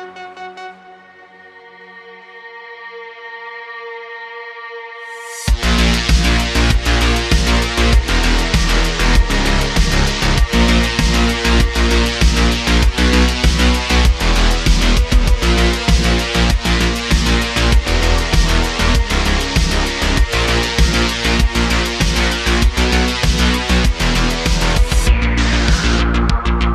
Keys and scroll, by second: 6.8 alt+shift+c, 10.4 alt+shift+c, 11.0 s, 15.2 Tab, 16.0 x, 17.1 g, 18.2 super+z, 18.4 super+z, 19.7 g, 20.6 g, 22.8 g, 22.9 x, 25.8 g, 26.4 z.